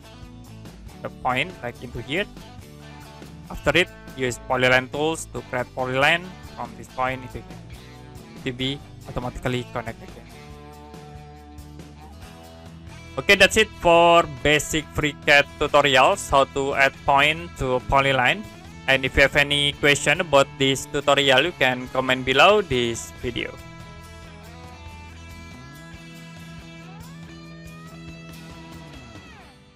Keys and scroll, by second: 9.5 Escape, 23.9 Print.